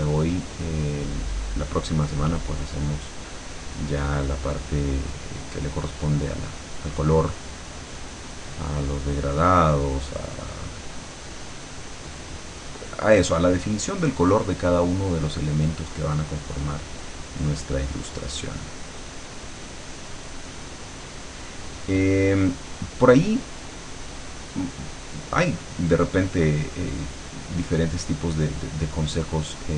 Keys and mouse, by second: 17.0-29.7 drag.